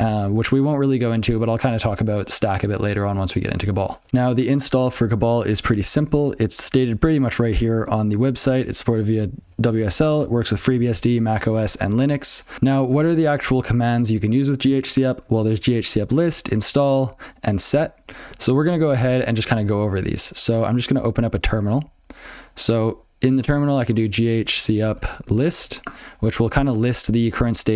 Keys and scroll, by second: 11.9 alt+x.